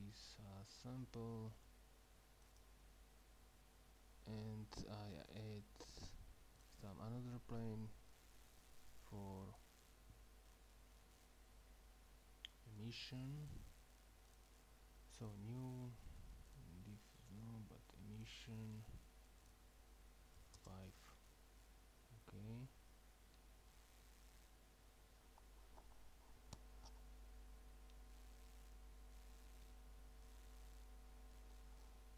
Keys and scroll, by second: 20.4-20.7 typing.